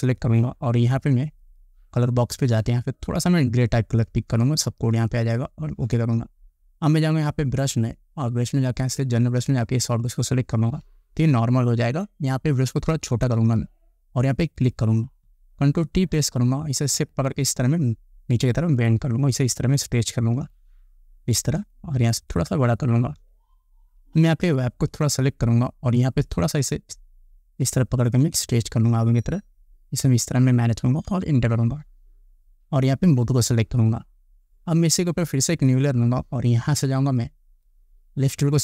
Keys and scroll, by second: 12.9 [, 16.1 ctrl+t, 31.3 Return.